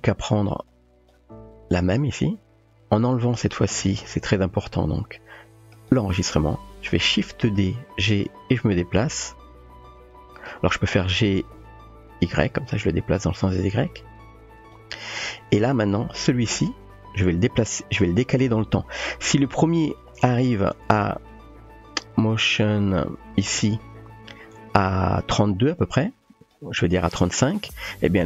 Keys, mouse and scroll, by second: 0.7-1.1 drag, 5.9 click, 7.6 shift+d, 11.3 g, 21.3-23.6 drag, 25.6-26.5 drag.